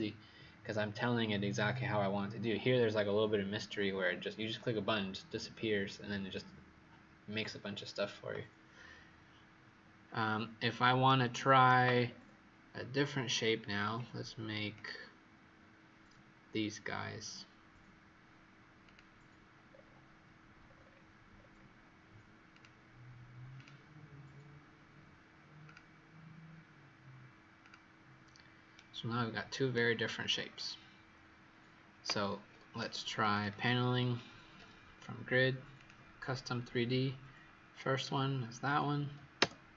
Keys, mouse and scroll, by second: 11.0 right click, 12.0-13.6 scroll down 3, 13.6-14.7 scroll up 4, 14.7 click, 19.6-20.6 scroll down 4, 20.6-21.1 scroll up 6, 21.5-22.4 scroll up 3, 22.4 click, 28.7 right click, 30.3-31.0 scroll down 4, 31.0-31.9 scroll up 1, 33.2 click.